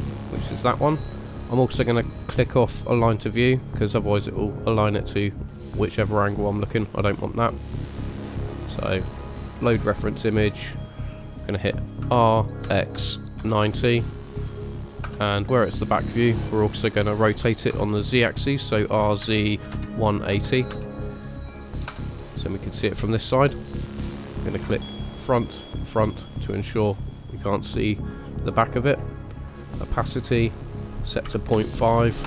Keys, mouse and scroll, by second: 10.5 middle click, 12.0 r, 15.4 middle click, 17.7 r, 22.2 middle click, 23.9 middle click, 25.2 click, 25.8 click, 26.3 middle click, 30.0 click, 30.5 click.